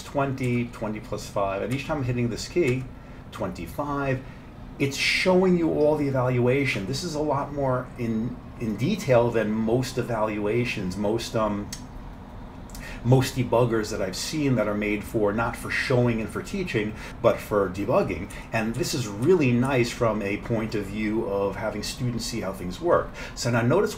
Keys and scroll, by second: 0.0 F7, 0.5 F7, 1.7 F7, 2.7 F7, 18.4 F7, 18.8 F7, 19.3 F7, 19.7 F7.